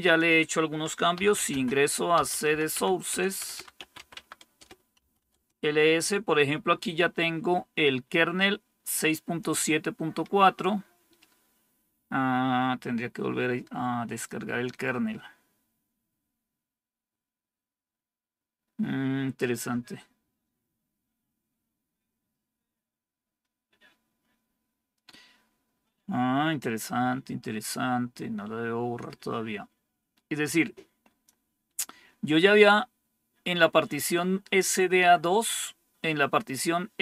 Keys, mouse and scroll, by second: 0.8-5.4 typing, 4.5 Return, 8.3-9.3 drag, 30.3 click.